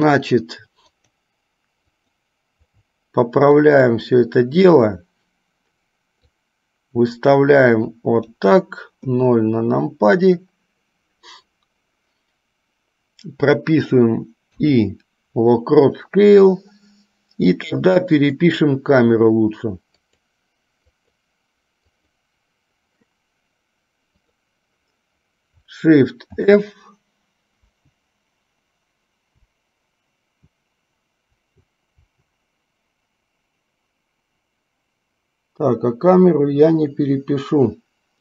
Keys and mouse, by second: 0.0 click, 1.0 click, 2.0 click, 3.6 shift+click, 6.4-8.6 drag, 9.2 KP_0, 14.6 i, 18.4 click, 20.2 click, 21.0 click, 22.0 click, 24.4 click, 26.5 shift+f.